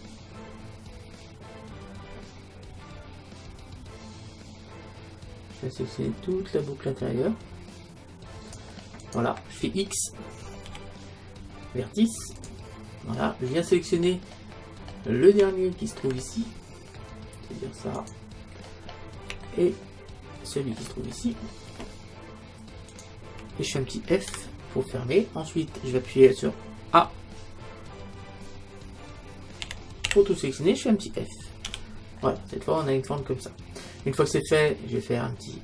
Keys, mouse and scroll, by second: 9.1-11.0 right drag, 10.7 x, 13.7-18.0 middle drag, 14.8-15.5 scroll down 1, 18.0-19.9 right drag, 19.5-21.2 middle drag, 21.2-22.9 scroll up 1, 22.9-24.9 right drag, 24.3 f, 24.8-26.8 middle drag, 29.7 a, 30.1 a, 31.7 f, 32.2 middle click, 35.3 middle click, 35.5 middle click.